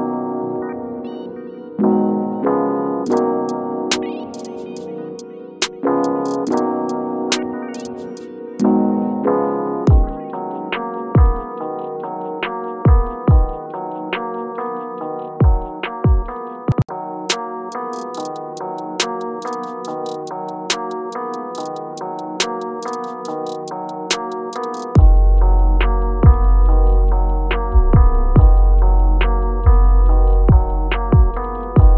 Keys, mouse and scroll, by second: 0.0-0.7 typing, 1.8-3.1 typing, 4.6 click, 5.5 ctrl+k, 5.8-9.6 drag, 9.6 scroll up 1, 10.8 shift+click, 11.5 scroll down 1, 12.1-13.4 drag, 13.8 scroll down 1, 14.3 scroll up 1, 14.9 click, 15.6 scroll down 1, 15.9 click, 16.5 scroll up 1, 17.8 click, 30.3 scroll down 1, 31.0 click.